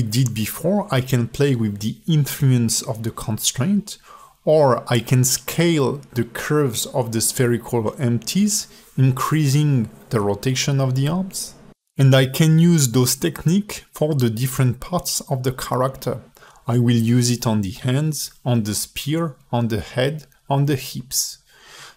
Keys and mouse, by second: 1.5 click, 1.9 shift+click, 2.2 shift+click, 2.6 x, 3.2 click, 3.5 shift+click, 3.9 shift+click, 5.0 click, 5.1 click, 5.7 a, 6.3 ctrl+alt+middle click, 7.4 shift+middle click, 8.1 middle click, 8.5 a, 8.8-9.2 drag, 10.1 s, 16.3 click, 18.6 click, 19.5 click, 19.7 click, 20.7 shift+h, 21.2 alt+shift+middle click, 21.7 a.